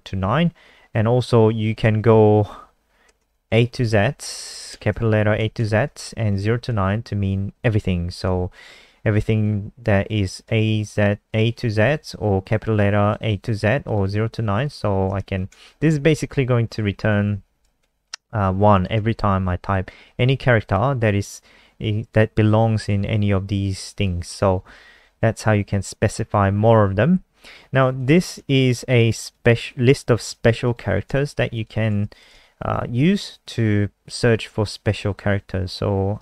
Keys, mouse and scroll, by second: 2.1 ctrl+Left, 2.2 ctrl+Left, 2.4 ctrl+Left, 2.6 ctrl+Left, 3.0-7.1 typing, 9.4 click, 15.2 ctrl+shift+Left, 16.4-17.6 typing, 17.8 ctrl+s, 18.7 click, 18.9 F5, 20.6 click, 29.2 shift+click, 29.7 ctrl+c, 29.9 click, 30.6 click, 31.5 shift+click, 32.0 ctrl+v, 32.2 click, 36.1 click.